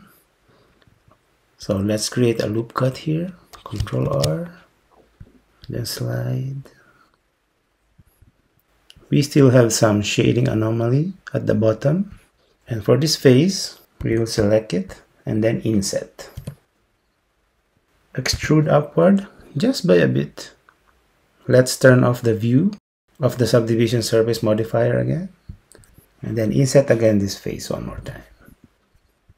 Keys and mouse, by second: 4.1 ctrl+r, 14.1 3, 14.5 click, 16.5 i, 18.4 e, 25.6-28.0 drag, 28.0 i.